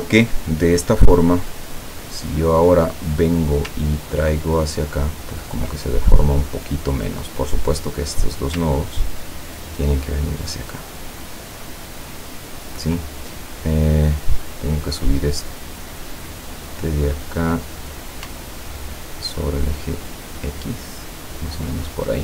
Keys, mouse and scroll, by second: 0.4 scroll down 2, 1.3 click, 3.6-5.8 ctrl+drag, 7.2 click, 8.8-12.9 ctrl+drag, 13.4 ctrl+click, 16.5 click, 18.7-22.0 ctrl+drag.